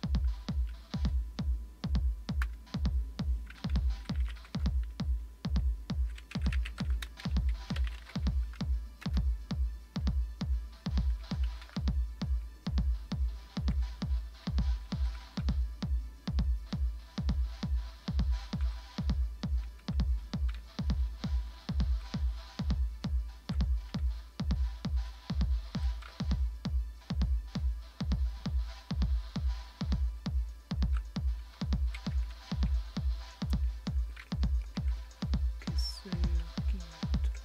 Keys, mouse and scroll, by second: 4.2-8.5 typing, 9.0 Return, 11.2 Up, 11.4 Up, 11.6 Up, 12.2-12.9 typing, 13.0-13.4 Page_Up, 14.4 Page_Down, 15.4 Down, 15.9 Down, 15.9-18.6 Down, 19.6 Down, 20.5-21.9 Down, 23.0 Down, 24.0 Up, 24.5 Up, 24.5 Up, 24.6-25.0 Up, 26.0 Down, 26.5 Down, 26.6 Down, 26.7 Down, 26.8-29.5 Down, 28.0 scroll, 29.7-30.8 Down, 31.5 Down, 32.5 Page_Down, 32.9 Page_Down, 35.6 Page_Down, 36.6 Up, 37.1 Up, 37.1-37.4 Up.